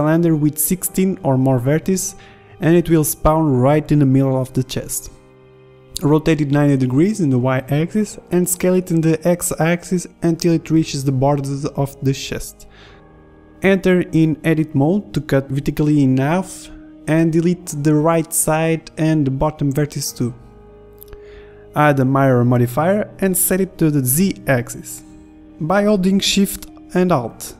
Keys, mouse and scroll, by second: 3.6 click, 4.7-7.2 drag, 6.0 r, 8.3 s, 9.9 Tab, 10.4 ctrl+r, 11.7 a, 12.7 Delete, 12.7 b, 14.9 click, 15.4 b, 16.3 Delete, 21.4 Tab, 22.1 ctrl+z, 25.3 drag, 25.5-26.5 middle drag.